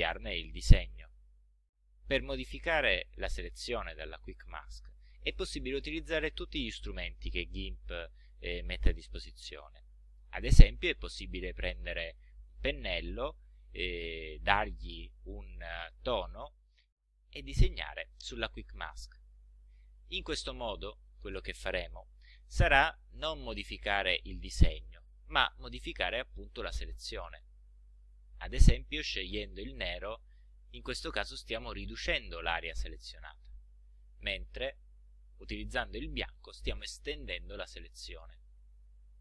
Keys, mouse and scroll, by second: 11.4 click, 15.7 click, 17.3 click, 18.6-21.0 drag, 21.1-26.7 drag, 28.4 click, 31.3-33.2 drag, 34.7 click, 35.8-39.2 drag.